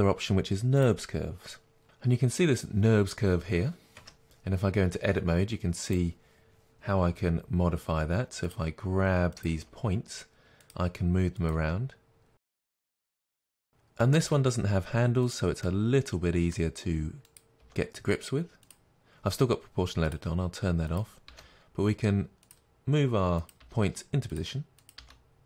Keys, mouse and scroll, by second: 1.8 middle click, 4.1 Tab, 5.2 middle click, 6.0 click, 7.2 g, 8.6 click, 9.6 g, 10.7 click, 11.6 g, 14.2 click, 14.3 g, 15.4 click, 15.7-17.4 middle drag, 17.4 click, 17.7 g, 20.2 click, 21.4 g, 22.6 click, 23.7 g, 24.5 click, 25.0 g.